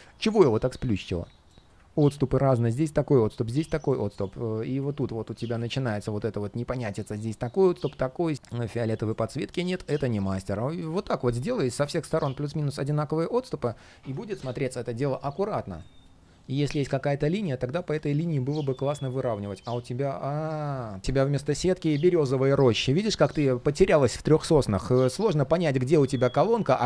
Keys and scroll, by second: 8.3 super+z, 18.8 ctrl+shift+4.